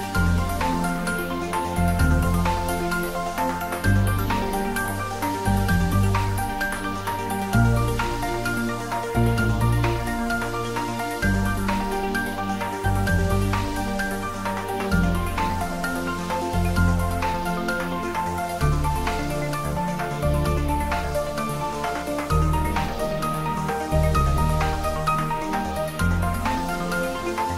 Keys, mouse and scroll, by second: 1.3 click, 1.6-3.0 middle drag, 3.0 click, 9.4 click, 10.5 middle click, 11.0 click, 12.3 click, 13.5 click, 13.9 ctrl+s, 15.2 click, 16.4 middle click, 16.9 click, 18.5 ctrl+s, 19.5 click, 20.2 Return, 20.9 click, 22.9 scroll down 1, 25.8 click, 26.0 ctrl+s, 26.4-27.3 typing.